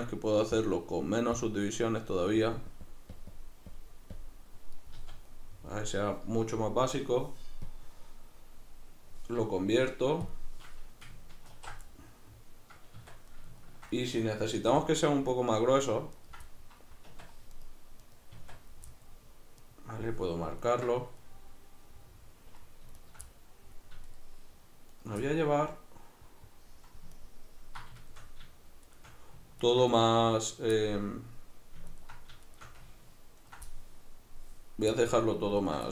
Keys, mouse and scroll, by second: 0.6-5.3 drag, 5.0 z, 5.3-7.7 middle drag, 7.7-11.9 drag, 11.6 ctrl+2, 11.9-15.3 middle drag, 13.0 Tab, 14.7 3, 15.3 right click, 16.1 ctrl+right click, 16.5-17.5 middle drag, 17.1 Tab, 17.5 right click, 18.0 right click, 18.3 Tab, 18.9 middle click, 19.6 right click, 20.6 ctrl+right click, 21.2-23.0 middle drag, 23.0 shift+right click, 23.3 middle click, 24.1 shift+right click, 25.0 shift+right click, 25.3-27.2 middle drag, 27.2 ctrl+right click, 28.9 shift+right click, 29.6 ctrl+right click, 30.0-31.9 middle drag, 31.9 ctrl+right click, 32.5 shift+right click, 33.4 ctrl+right click, 33.7-35.6 middle drag, 35.6 ctrl+right click.